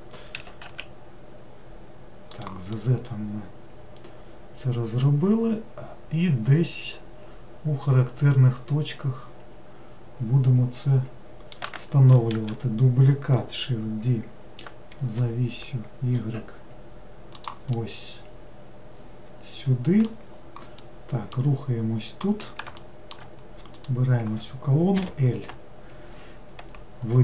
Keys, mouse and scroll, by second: 0.4 s, 2.8-5.9 middle drag, 12.4 shift+d, 17.8-20.3 middle drag, 20.3 scroll down 1, 20.9-21.9 middle drag, 21.9 scroll down 1, 22.8-23.8 shift+middle drag, 23.8 click, 25.0 l.